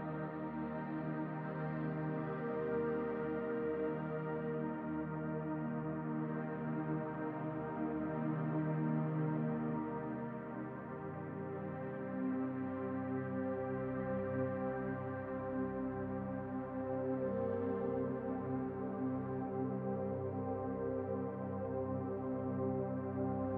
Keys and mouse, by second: 0.1-3.9 drag, 5.6-10.0 drag, 10.3-10.9 middle drag, 11.0 shift+click, 12.1 shift+drag, 13.3-14.5 drag, 15.8-17.6 drag, 18.3-21.4 drag, 22.2-23.5 middle drag.